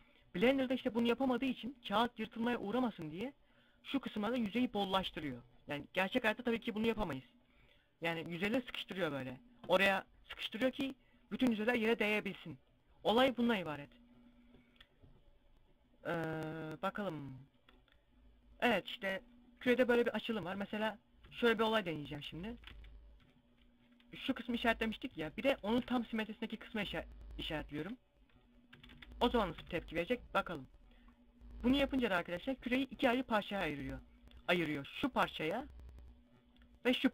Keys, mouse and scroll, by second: 0.4 scroll up 1, 13.3 scroll down 1, 17.1 middle click, 19.1 KP_7, 19.2 KP_5, 20.0 z, 20.4 scroll up 1, 20.6 a, 25.1 alt+shift+right click, 27.2 ctrl+e, 28.1 a, 28.4 a, 29.2 u, 30.6 scroll up 1, 31.1 scroll down 1.